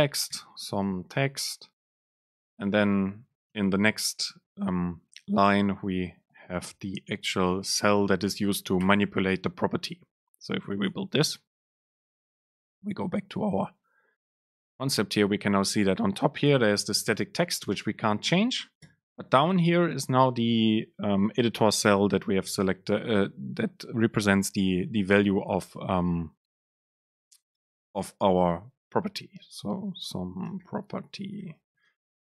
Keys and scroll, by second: 2.2 BackSpace, 3.6 Return, 5.5 super+space, 11.0 ctrl+shift+super+F9, 16.7 BackSpace, 19.0 Down.